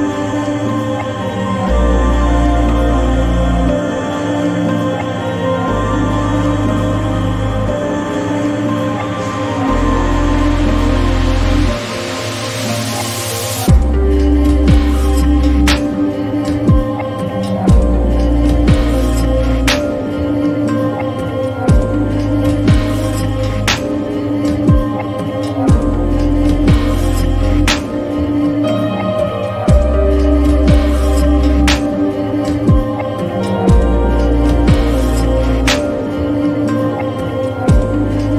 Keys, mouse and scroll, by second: 0.5-9.8 drag, 3.2 typing, 10.9-18.0 drag, 20.8 click, 22.7 typing, 26.6 click, 26.6 typing, 26.6 click, 29.9-36.5 drag, 37.1-38.3 drag, 37.3 typing.